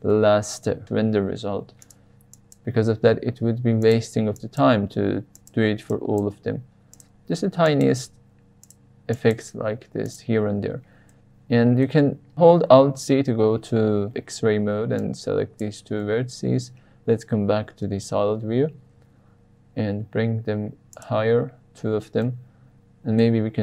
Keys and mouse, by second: 0.8 g, 1.3 z, 1.8 click, 2.4 drag, 3.0 g, 3.2 z, 3.8 click, 4.3 click, 4.7 g, 4.8 z, 5.3 click, 5.9 click, 6.3 g, 6.4 z, 6.9 click, 7.7 click, 7.9 g, 8.6 drag, 9.1 click, 9.4 g, 10.0 drag, 11.1-11.8 middle drag, 12.8 alt+z, 14.9-15.7 drag, 16.5 alt+z, 18.5 g, 18.9 z, 20.9 click, 22.2-23.2 middle drag.